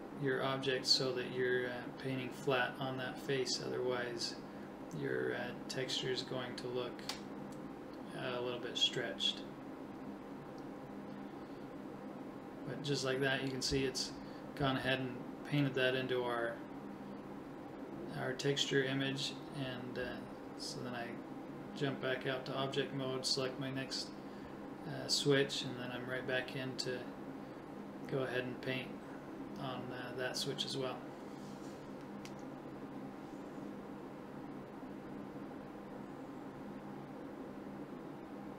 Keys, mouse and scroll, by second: 1.2 right click, 3.1 right click, 4.3 [, 4.4 [, 4.5 [, 5.0-7.1 drag, 11.3-14.3 middle drag, 18.2-19.4 drag, 19.7 click, 20.4 click, 20.9 right click, 22.9 middle click, 23.9 KP_7, 26.0 KP_1, 31.3-32.4 right drag, 33.3 right click, 34.6-37.3 drag, 37.9-38.5 drag.